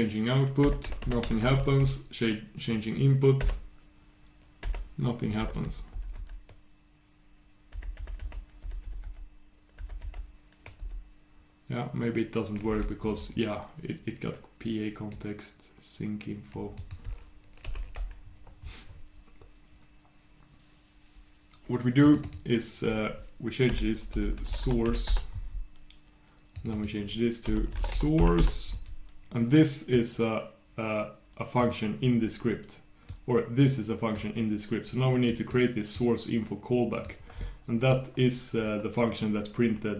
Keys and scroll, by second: 1.0 super+\.